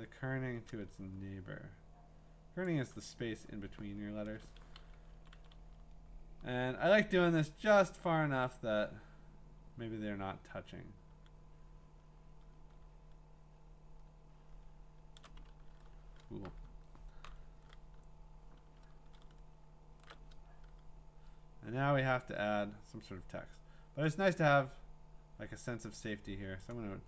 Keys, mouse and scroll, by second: 2.6 click, 4.2 ctrl+Return, 4.7 v, 5.1 Left, 5.3 Left, 5.5-6.5 Left, 6.7 Left, 6.9 BackSpace, 7.1 BackSpace, 7.6 BackSpace, 12.9-13.9 scroll, 13.9-16.0 scroll, 18.6 t, 19.2 scroll, 26.6 click.